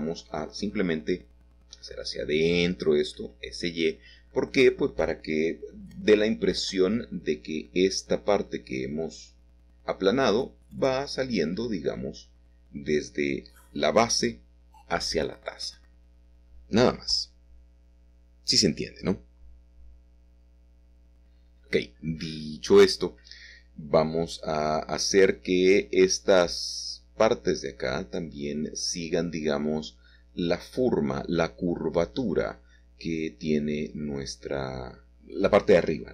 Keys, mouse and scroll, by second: 0.8 shift+click, 1.1 shift+click, 6.5 click, 8.1 shift+click, 8.5 shift+click, 9.3 shift+click, 9.7 shift+click, 13.7-19.4 middle drag, 19.5-23.3 drag, 24.6-29.1 shift+drag, 31.2 click, 33.5-35.7 middle drag, 35.7-36.1 scroll up 1.